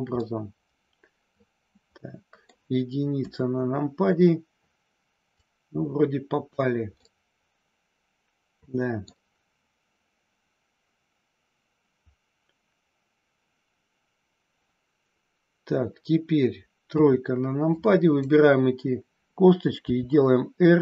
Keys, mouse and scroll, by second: 0.2-2.6 middle drag, 3.1 KP_1, 5.2-6.5 drag, 6.9 scroll up 1, 7.1-9.2 middle drag, 16.8 KP_3, 17.8 click, 19.7 r.